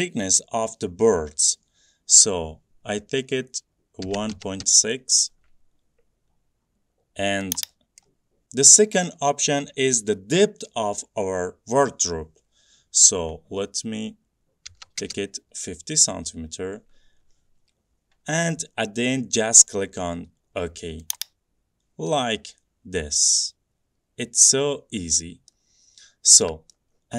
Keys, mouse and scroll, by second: 3.9-5.1 typing, 8.1 click, 14.8-15.1 typing, 21.3-24.7 drag, 25.6 middle click, 25.7-26.4 scroll down 2, 26.9 middle click, 27.0 middle click.